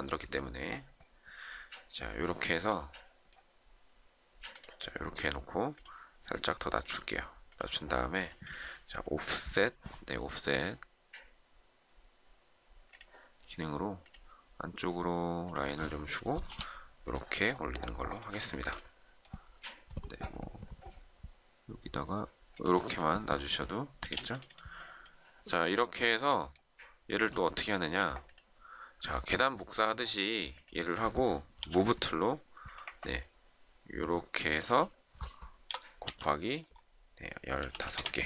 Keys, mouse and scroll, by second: 16.4 p, 18.3 shift+middle click, 23.9 space, 31.5 m, 35.7 *, 37.3-38.0 typing.